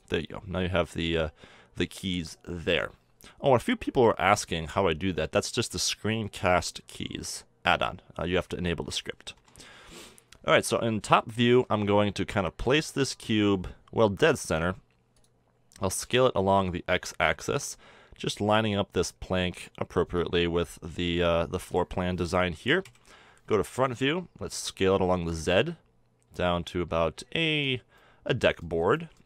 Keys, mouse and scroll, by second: 0.4-4.5 middle drag, 1.5 n, 6.4-8.3 drag, 9.4 KP_7, 10.1-12.6 middle drag, 11.5 g, 15.8 s, 20.2 click, 22.4 middle click, 22.9 KP_1, 24.6 s, 27.8-29.2 middle drag.